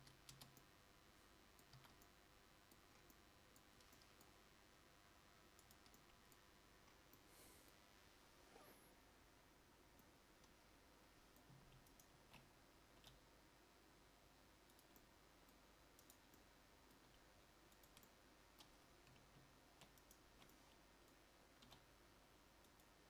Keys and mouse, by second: 0.0 Tab, 0.4 Tab, 1.8 a, 15.1 g, 17.1 g.